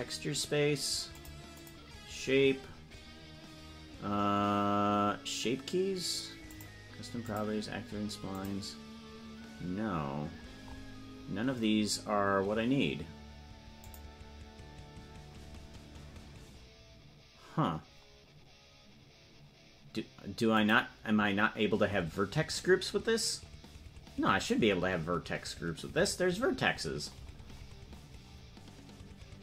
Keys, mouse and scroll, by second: 1.1 click, 1.5 click, 2.2-2.7 scroll down 12, 6.4 click, 7.2 click, 8.3 click, 10.3 scroll up 2, 13.8 click, 13.8 scroll up 8, 20.5 click, 28.2 scroll down 12.